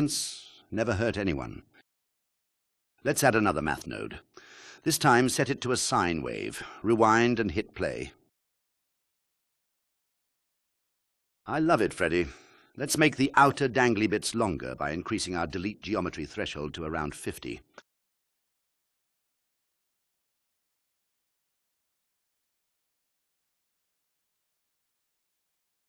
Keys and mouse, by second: 0.2 click, 1.4 click, 2.5 shift+a, 4.7-7.3 drag, 8.3 click, 18.4 alt+click, 20.1-21.5 drag, 23.3 drag, 23.8 click, 25.7 KP_1.